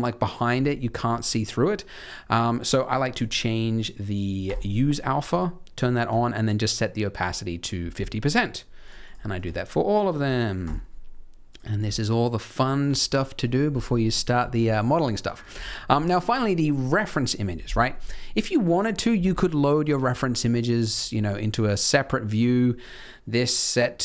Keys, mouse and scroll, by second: 0.7 middle click, 1.2 middle click, 2.1 middle click, 4.4 click, 5.8 click, 7.9 click, 8.8 click, 9.0 click, 9.3 click, 10.6 click, 11.4 click, 11.7 click, 13.1 middle click, 13.5 scroll up 1, 15.1 middle click, 15.4 alt+a, 20.4 click.